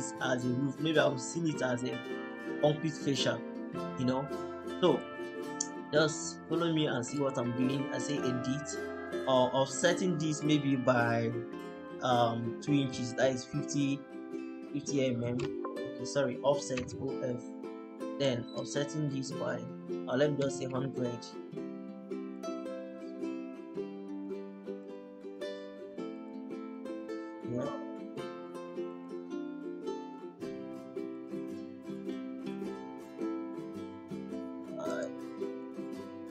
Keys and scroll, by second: 14.9-17.3 typing, 20.0-21.0 typing, 33.8-34.8 typing.